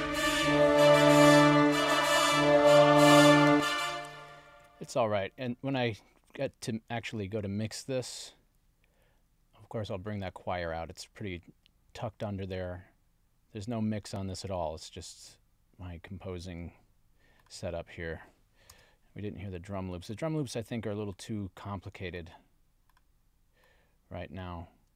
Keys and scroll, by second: 3.5 space, 4.6 super+s.